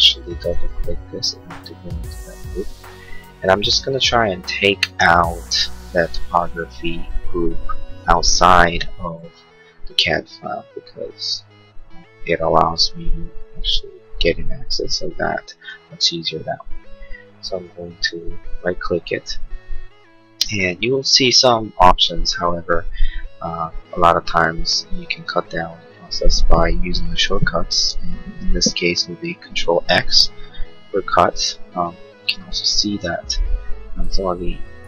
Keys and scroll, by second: 30.0 ctrl+x.